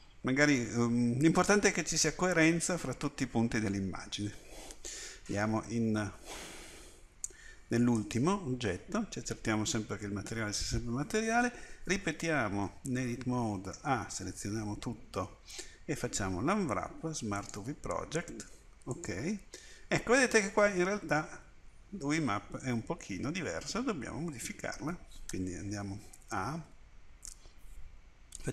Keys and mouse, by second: 5.7 Tab, 12.5 Tab, 13.8 a, 14.5 a, 16.0 u, 26.0 a, 26.2 a, 26.6 a.